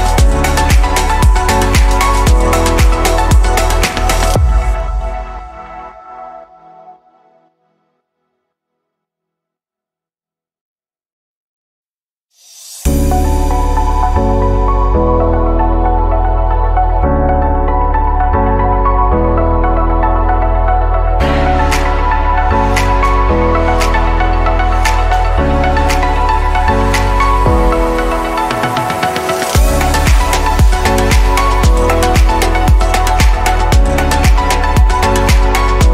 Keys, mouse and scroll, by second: 0.8-5.7 drag, 5.7-7.8 middle drag, 7.8-10.6 drag, 16.8 click, 17.8-19.9 middle drag, 19.9-20.3 scroll down 3, 20.7-23.1 middle drag, 23.1 click, 24.2-24.5 scroll up 1, 26.0 click, 28.4 ctrl+z, 31.0-32.4 drag, 32.9-33.4 scroll down 2, 33.4-35.9 shift+middle drag.